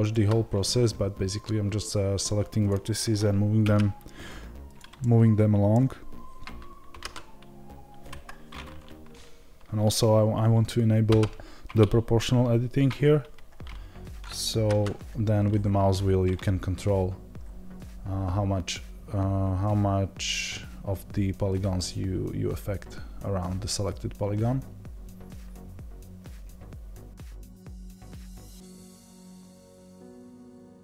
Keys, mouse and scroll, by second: 0.0 click, 2.1-4.8 drag, 4.8 scroll up 1, 4.9-27.3 middle drag, 6.5 z, 27.4 click, 28.8 click, 28.9 middle click, 29.4-30.4 drag, 30.4 g.